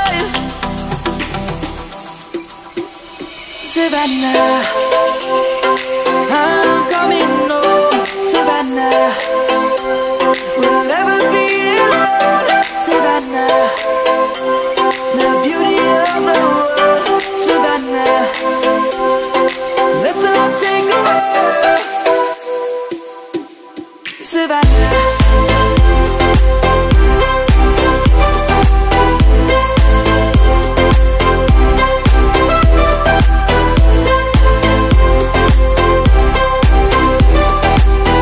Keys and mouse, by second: 3.3 click, 8.6 g, 13.3 click, 18.1 click, 19.5 g, 22.6 s, 24.7 click, 25.5 g, 33.0 middle click, 34.7 s, 38.0 y.